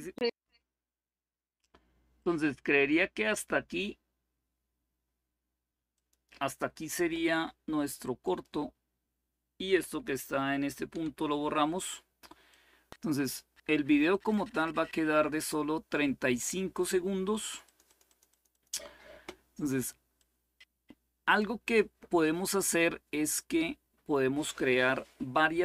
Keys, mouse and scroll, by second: 0.0-1.0 drag, 1.9-2.9 drag, 5.7-8.8 drag, 10.7 Delete, 12.2-14.1 drag, 17.1-18.4 drag, 19.9-21.2 drag, 21.8-24.0 drag.